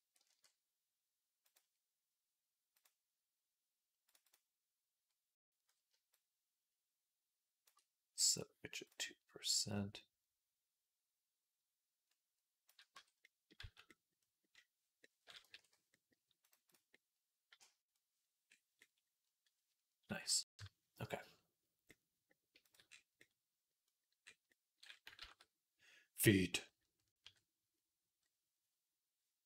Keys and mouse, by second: 0.1 ctrl+b, 2.6 ctrl+b, 2.6-5.7 drag, 7.5-22.5 drag, 12.8 Tab, 13.4 z, 15.4 ctrl+s, 16.2-22.5 middle drag, 16.2-29.4 right drag, 20.2 KP_3, 25.1 ctrl+s, 27.1 KP_3.